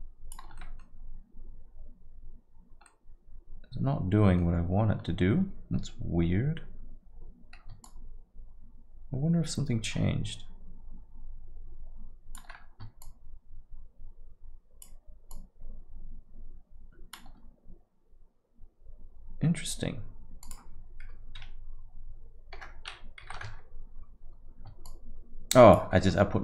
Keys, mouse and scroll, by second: 0.6 middle click, 2.9 middle click, 5.0 scroll up 1, 5.8 scroll up 2, 7.8 shift+click, 13.0 shift+click, 15.3 shift+click, 20.4 click, 24.8 shift+click.